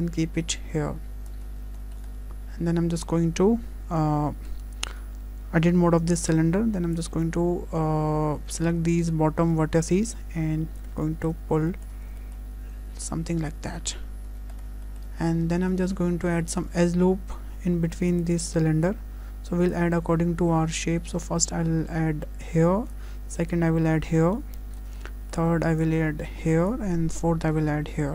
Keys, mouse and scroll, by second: 1.5 scroll up 2, 1.8 shift+middle click, 2.2-3.0 scroll down 4, 4.9 Tab, 6.3 click, 8.5 click, 11.0 shift+middle click, 11.4 scroll up 1, 11.7 shift+middle click, 12.5 shift+middle click, 13.7-14.2 scroll up 2, 14.3 Tab, 14.5-14.9 scroll down 2, 14.9 shift+middle click, 15.4 scroll up 1, 15.7 shift+middle click, 16.0 Tab, 16.4 shift+middle click, 18.1 click, 23.5 click, 25.0 shift+middle click, 25.8 click, 27.2 click.